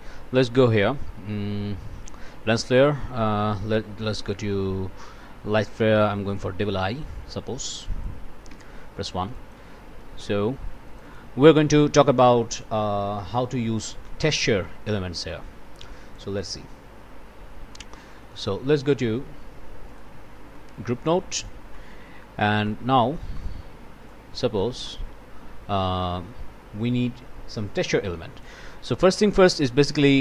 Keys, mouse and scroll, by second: 0.4 click, 6.3 click, 7.8 click, 8.5 1, 9.3 click, 10.0 click, 10.9 click, 13.4 click, 15.3-16.4 drag, 18.2 click, 19.9 click, 20.5 click, 21.3 click, 21.7 click, 22.6 click, 23.3 click, 24.1 click, 24.8 click, 25.6 scroll down 1, 26.0 click, 27.8 click, 30.0 click.